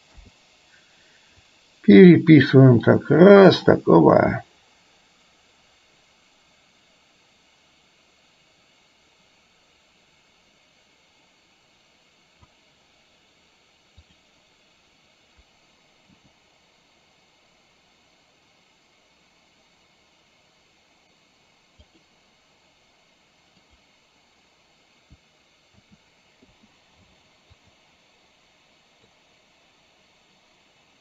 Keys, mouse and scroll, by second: 0.2 i, 1.6-12.6 drag, 16.1 g, 26.0 a, 26.6 i, 27.7 click, 29.3-31.0 drag.